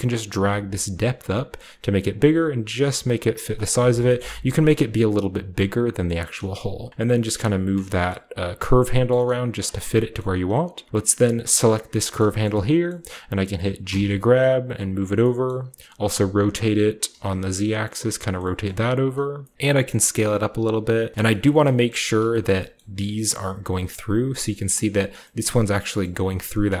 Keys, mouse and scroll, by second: 0.2-4.7 shift+drag, 7.6-8.6 shift+drag, 8.0 middle click, 8.9-10.8 scroll up 1, 9.5 shift+click, 9.5 shift+middle click, 10.8 shift+middle click, 10.9-11.6 scroll down 1, 11.6 right click, 12.5-13.8 shift+right drag, 14.0 typing, 14.9-16.1 drag, 16.1-17.0 typing, 18.1-19.5 drag, 18.7-21.1 typing, 19.0 middle click, 19.5-20.5 scroll up 1, 20.2 click, 20.2 middle click, 21.3-23.4 scroll up 1, 22.0 shift+middle click, 22.4 shift+middle click, 22.7-24.2 shift+middle drag, 23.4-24.2 shift+scroll down 1, 23.4 typing, 24.2 scroll down 1, 24.4 middle click, 24.4-26.6 scroll up 1, 25.1 middle click, 25.4 middle click, 26.0 middle click, 26.6 scroll down 2, 26.6-26.8 typing.